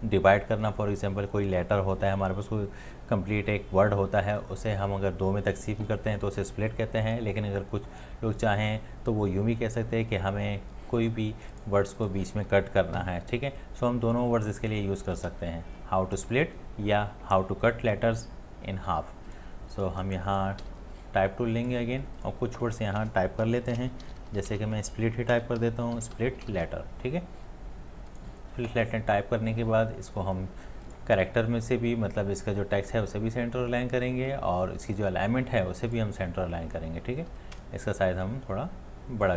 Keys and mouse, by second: 15.4 t, 15.4-39.2 shift+click, 15.7 shift+click, 15.7 shift+click, 15.8 shift+click, 20.6 t, 23.8-24.5 typing, 25.3 Return, 25.6-26.5 typing, 37.5 alt+click, 38.0 shift+click, 38.0 shift+click, 38.1 shift+click.